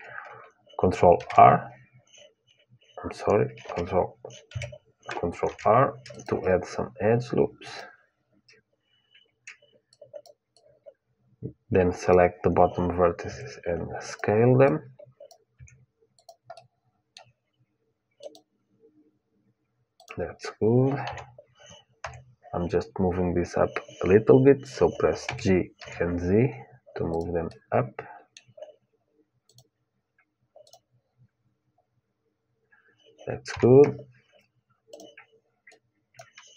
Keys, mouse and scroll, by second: 0.9 shift+r, 3.4 ctrl+r, 4.3 Tab, 5.2 ctrl+r, 9.6-12.3 drag, 13.0 s, 14.4-16.4 drag, 15.3 s, 16.4-17.9 middle drag, 17.9-21.7 drag, 20.8 KP_1, 24.2 a, 25.0 g, 27.2-29.3 middle drag, 29.2-32.4 drag, 33.2 KP_1, 34.6-36.5 drag.